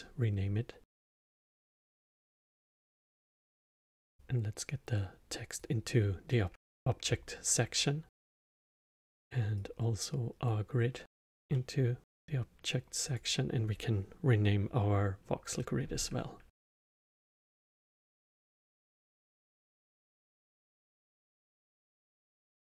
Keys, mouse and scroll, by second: 1.4-3.0 middle drag, 3.0 click, 3.4 click, 4.1 click, 8.1 click, 9.5 click, 11.5-13.0 middle drag, 13.0-16.1 drag.